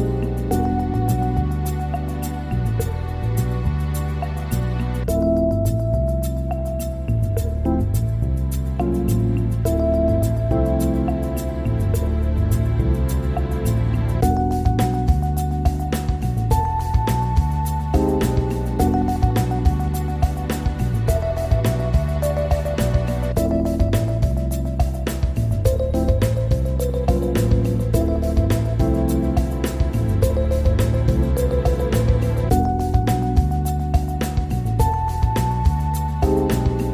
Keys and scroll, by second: 17.6 ctrl+z, 18.5 ctrl+g, 22.1 ctrl+r, 30.1 ctrl+z.